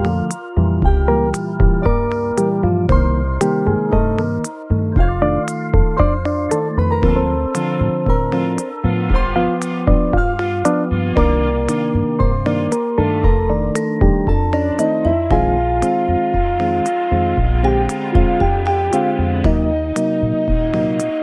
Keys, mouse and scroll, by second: 0.5 double click, 1.2 2, 1.6 0, 1.6 0, 19.0-20.0 scroll down 3.